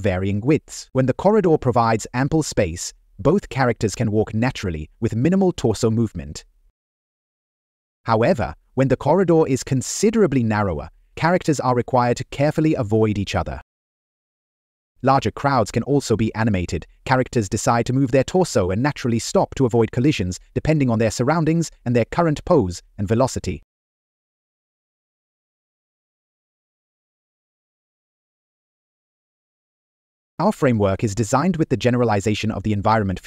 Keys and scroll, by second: 14.5 Down, 15.3 Right, 16.1 Right, 16.8 Left, 19.5 Up, 21.0 Right, 21.1 Down, 22.8 Right, 25.7 Down, 27.8 Left, 28.8 Down, 29.9 Right, 30.6 Up.